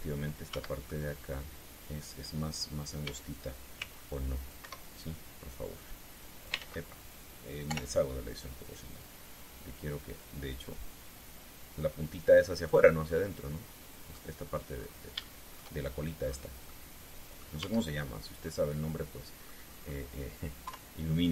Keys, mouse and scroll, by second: 0.1 shift+middle click, 1.2 Tab, 1.6 middle click, 3.7 a, 4.5 c, 4.8 click, 5.3 Escape, 6.5 click, 7.3 ctrl+z, 8.4 o, 9.7-13.6 drag, 13.8 scroll down 2, 14.1 middle click, 15.5-15.8 scroll up 1, 15.9 shift+middle click, 16.9 scroll down 1, 17.4 middle click, 18.1 scroll up 2, 18.3 Tab, 18.7 scroll down 2, 19.2-20.4 drag.